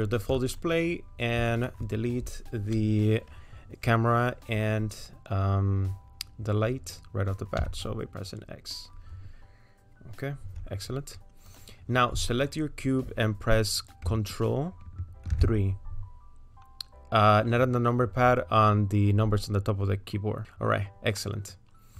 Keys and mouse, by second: 1.5 shift+click, 8.2 x, 11.5 click, 15.3 ctrl+3, 21.2 middle click.